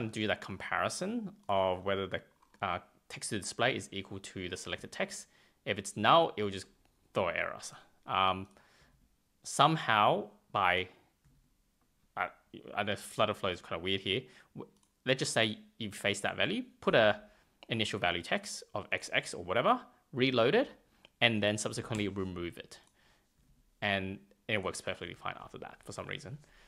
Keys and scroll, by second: 8.7 super+Tab, 11.1 super+Tab, 20.4 super+Tab, 21.6 super+a, 21.8 BackSpace, 23.3 super+Tab.